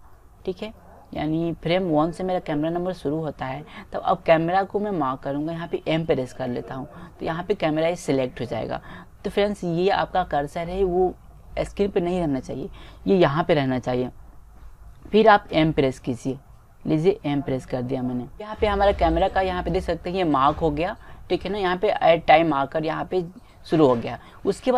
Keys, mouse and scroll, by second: 17.1 m.